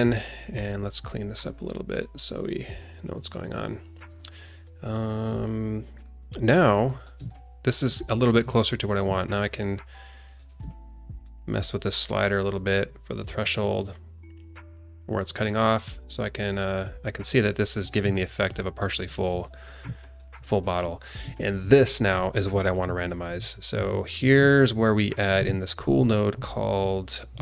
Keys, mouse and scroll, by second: 0.5 click, 1.9 click, 2.8 click, 6.1-6.9 scroll down 1, 6.9 scroll up 1, 7.3 shift+middle click, 9.3 shift+click, 10.6 shift+click, 18.1-19.2 alt+middle drag, 19.6 scroll down 2, 20.0 alt+shift+middle click, 20.6 click, 21.0 scroll down 1, 21.3-22.3 alt+shift+middle drag, 22.3 scroll down 1, 22.6 alt+shift+middle click, 23.0 click, 23.3 g, 24.1 scroll up 2, 24.4 alt+shift+middle click, 24.8 scroll down 2, 25.6 ctrl+shift+a.